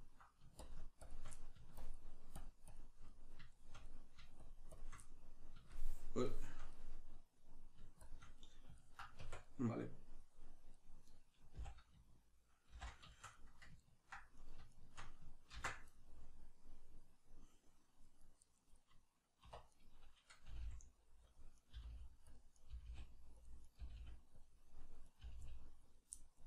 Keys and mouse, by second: 0.6 shift+click, 1.3 middle click, 1.8-3.0 shift+drag, 3.0-4.4 middle drag, 4.4 shift+click, 5.0-8.0 middle drag, 8.0 shift+click, 8.4-14.4 middle drag, 9.2 Tab, 11.5 a, 12.7 shift+n, 14.4 right click, 14.7 shift+right click, 15.5 ctrl+x, 15.9-18.4 middle drag, 18.4 right click, 19.5 middle click, 19.5 1, 19.7 right click, 20.5 g, 21.3 click, 21.6 right click, 21.7 g, 22.4 click, 22.5 right click, 22.7 g, 23.5 click, 23.7 right click, 23.8 g, 24.5 click, 25.1 right click, 25.2 g, 25.9 click, 26.2 middle click.